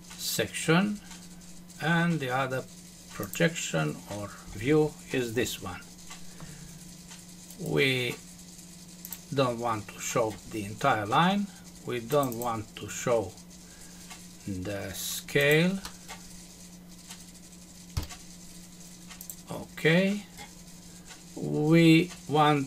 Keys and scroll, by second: 17.9 Delete.